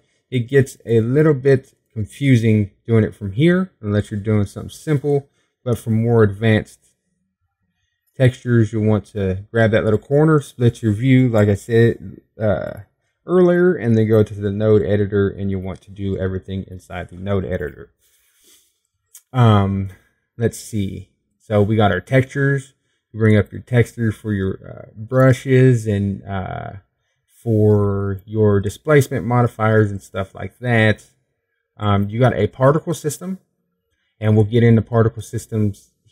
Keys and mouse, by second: 7.7-10.2 drag, 10.2 middle click.